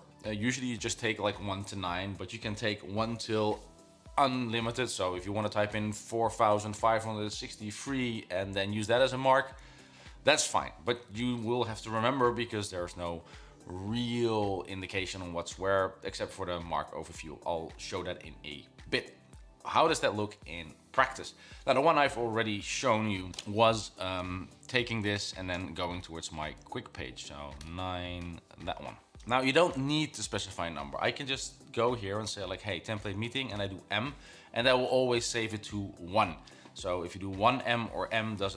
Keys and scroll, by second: 23.4 9, 24.7 BackSpace, 24.7 Escape, 25.6 9, 26.4 shift+', 27.7-28.8 typing, 33.6 m.